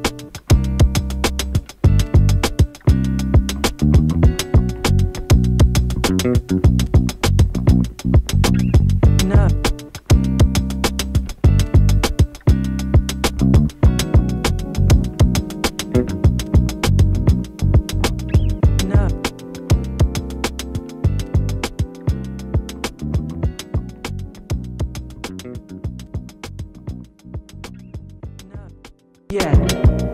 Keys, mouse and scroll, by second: 3.7 space, 6.7 click, 7.0 space, 8.3 -, 8.7 space, 12.7-13.2 typing, 13.8 click, 20.6-27.9 drag, 28.2 Return, 28.8-29.8 typing, 30.0 Return.